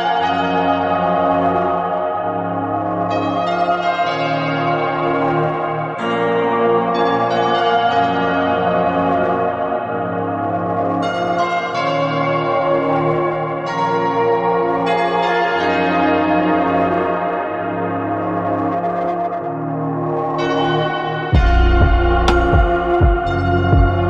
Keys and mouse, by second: 7.7 s, 9.4 s, 12.1 s, 12.7 click, 19.4 middle click, 22.2 click.